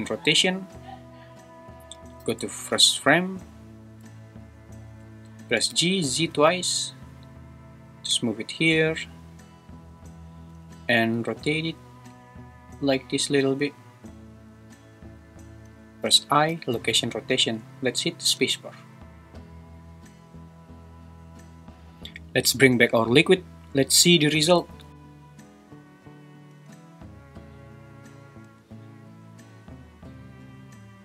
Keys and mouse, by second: 0.6 i, 2.2 shift+Left, 5.6 g, 6.0 z, 6.2 z, 11.1 r, 11.3 r, 17.1 i, 18.3 space, 21.6 space, 24.8 shift+Left, 24.9 space, 26.5 space, 27.9 click, 28.4 space.